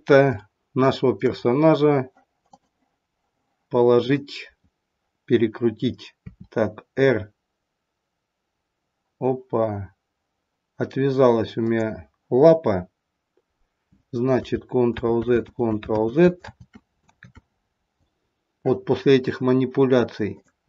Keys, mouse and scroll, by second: 0.4 shift+middle click, 1.1 shift+middle click, 2.3 click, 4.0 click, 6.3 r, 14.9 ctrl+z, 15.5 ctrl+z, 16.0 ctrl+z, 16.5 ctrl+z, 17.1 ctrl+z, 20.3 click.